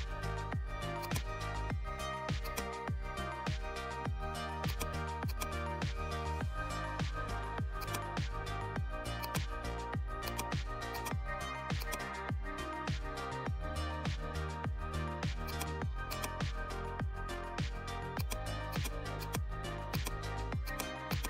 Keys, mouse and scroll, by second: 7.7 click, 8.5 right click, 9.1-13.3 drag, 13.3 ctrl+z, 14.5 right click, 15.4 click, 16.8-17.2 typing, 18.1-21.2 drag.